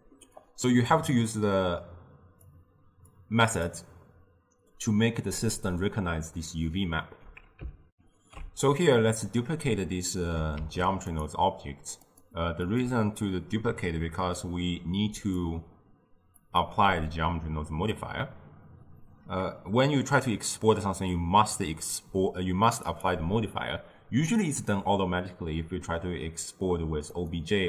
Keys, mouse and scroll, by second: 0.4-1.5 drag, 3.2 click, 8.0 ctrl+alt+shift+q, 10.7 shift+d, 12.2 click, 12.7 click, 15.2 click, 16.5 click, 24.5-27.6 drag.